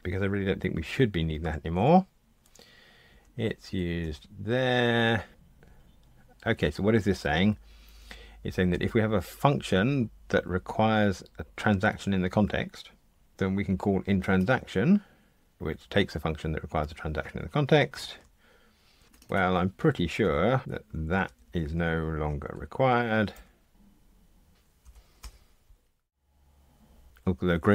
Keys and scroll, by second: 1.4 ctrl+alt+h, 3.1 Down, 5.3 shift+super+F12, 14.3 super+b, 17.9 super+[, 20.2 alt+Up, 20.6 alt+Down, 23.3 Delete.